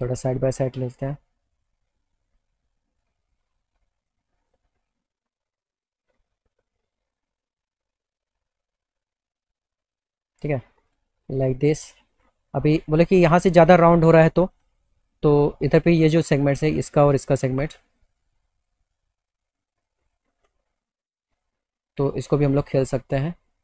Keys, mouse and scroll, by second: 4.5 click, 5.2 alt+middle click, 6.2-10.8 alt+middle drag, 11.7 click, 12.6 alt+middle click, 14.6 click, 15.5 middle click, 17.5 ctrl+click, 18.4 alt+middle click, 20.1 ctrl+click, 22.1 click.